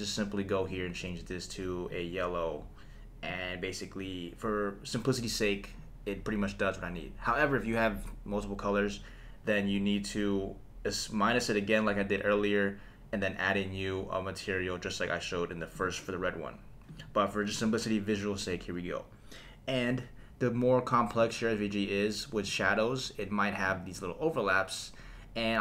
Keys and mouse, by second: 0.7 click, 15.7 click, 16.9 click, 17.5 click, 21.2 click, 21.5 click, 23.6 click.